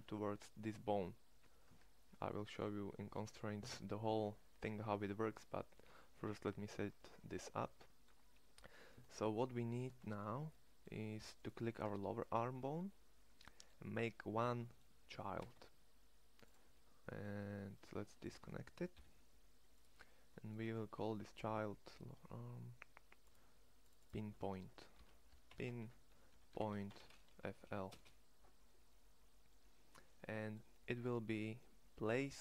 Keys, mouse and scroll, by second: 1.5 Tab, 11.6 Tab, 14.9 e, 18.7 alt+p.